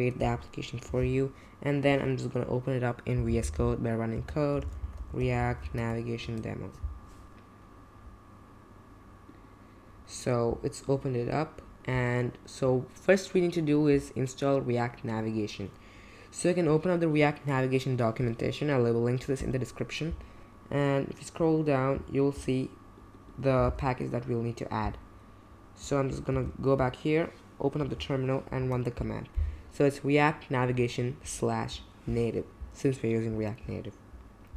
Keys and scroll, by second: 1.0 ctrl+c, 2.9-6.7 typing, 14.8 Tab, 14.8 Return, 14.8 typing, 20.0-20.7 typing, 23.7 super+c, 26.3 super+j, 27.8 super+v, 28.6 Return.